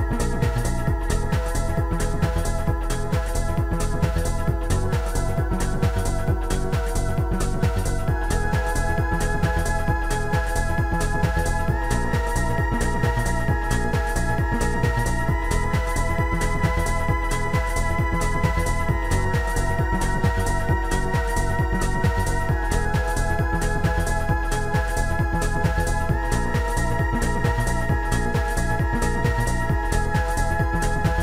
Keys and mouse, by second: 1.4 shift+click, 2.0 click, 4.2 click, 5.1 click, 8.0 click, 12.6 click, 17.3 click, 19.3 shift+click, 21.1 shift+click, 22.0 Delete, 23.9 Delete, 23.9 shift+click, 27.4 click, 29.1 click.